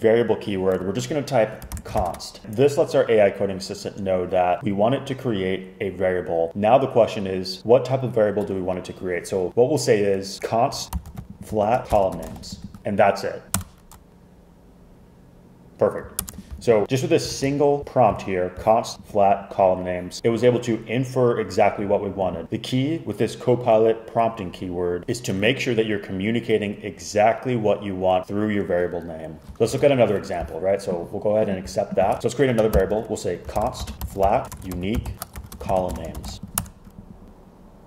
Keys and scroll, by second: 1.5-2.6 typing, 10.7-13.6 typing, 13.6 Return, 16.3 super+Return, 17.4 super+z, 29.5 ↻, 32.2 Return, 32.8 super+k, 33.3-36.8 typing.